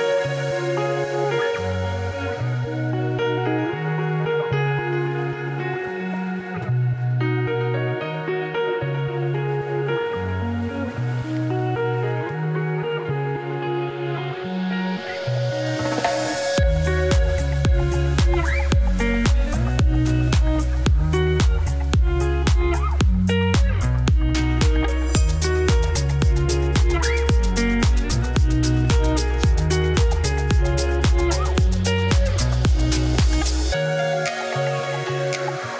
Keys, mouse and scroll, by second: 0.5 alt+click, 0.9-1.3 ctrl+KP_Add, 1.6 ctrl+KP_Subtract, 2.1 s, 3.0 Tab, 3.3 scroll down 1, 3.5 click, 3.6 middle click, 4.0 scroll down 1, 4.1 middle click, 4.7 scroll up 1, 4.8 click, 5.0 middle click, 5.3 s, 6.1-7.7 shift+middle drag, 7.7 scroll up 5, 8.0 click, 8.6 click, 8.7 shift+middle click, 9.1 shift+click, 10.7 ctrl+l, 11.0 shift+middle click, 11.9 click, 12.2 KP_3, 12.7 KP_Decimal, 12.9 middle click, 13.1 scroll down 1, 13.2 scroll up 3, 13.6-13.9 scroll down 3, 13.9 click, 14.1 click, 14.4 right click, 15.2-16.4 drag, 17.3 ctrl+l, 19.3 ctrl+l, 20.1 click, 20.5 right click, 20.9 click, 22.1 click, 22.2 click, 22.9 right click, 23.2-24.2 middle drag, 24.2 scroll down 2, 24.6 click, 24.8-27.9 shift+middle drag, 28.0 Tab, 28.4 1, 28.4 click, 29.0 shift+s, 29.1 Tab, 30.5 shift+a, 30.6 Tab, 30.7 s, 34.0 shift+s, 34.3 shift+middle click, 34.6 scroll up 2, 34.8 middle click, 35.4 g.